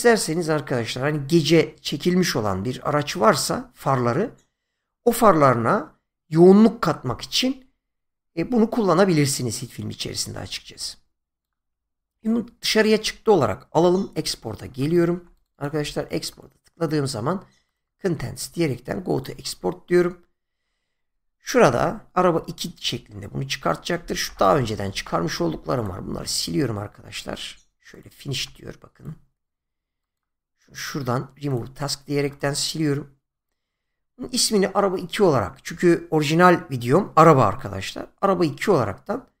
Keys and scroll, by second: 14.1 <, 15.6 <, 24.9 Delete, 28.2 Delete.